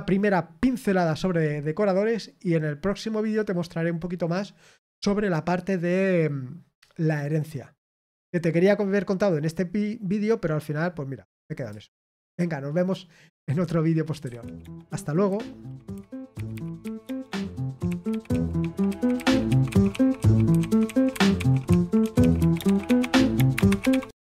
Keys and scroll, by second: 14.2 super+x.